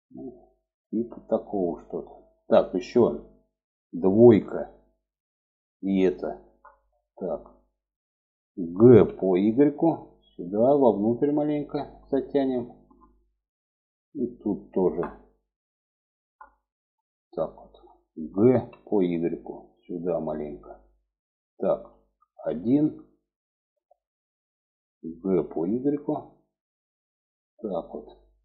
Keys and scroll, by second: 3.6 2, 8.2 g, 17.8 g, 21.8 1, 24.5 g.